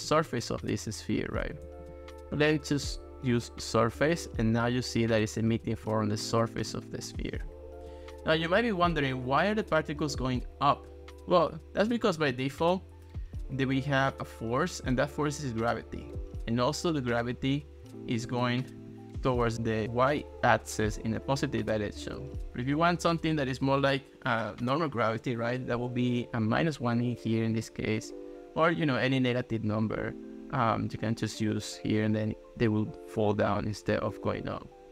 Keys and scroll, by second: 0.1 ctrl+s, 1.7 ctrl+x, 5.7 ctrl+s, 7.3 ctrl+x, 26.3 Down, 26.5 1, 27.5 Return.